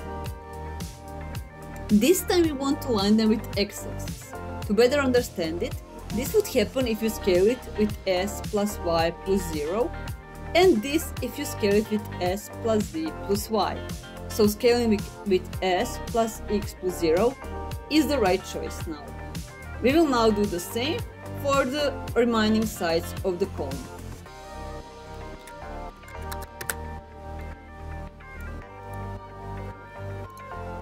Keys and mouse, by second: 0.0 ctrl+click, 7.0 s, 8.0 y, 8.8 KP_0, 11.7 s, 12.4 z, 13.0 KP_0, 15.4 s, 16.0 x, 16.5 KP_0, 17.8 KP_Enter, 19.1 middle click, 20.3-22.3 middle drag, 25.6 s, 25.8 y, 26.0 KP_0, 26.3 KP_Enter, 27.2 middle click, 30.0 ctrl+click, 30.7 s.